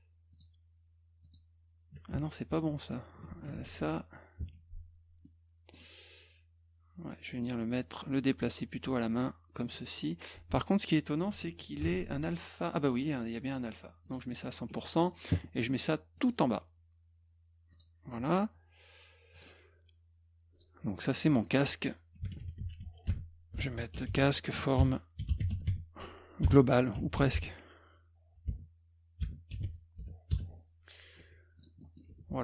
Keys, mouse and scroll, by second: 0.3 click, 1.3 click, 2.1 ctrl+z, 2.5 ctrl+z, 3.7 click, 4.4 F1, 5.3 middle click, 7.4-9.2 drag, 10.4 F1, 11.8 ctrl+shift+f, 13.5 right click, 14.1 click, 14.7 F1, 15.0 click, 16.2 click, 17.7 click, 19.4 click, 20.6 click, 21.1 click, 21.2 click, 22.0-30.5 typing, 31.2 F1, 31.6 click, 31.8 middle click, 32.1 F2.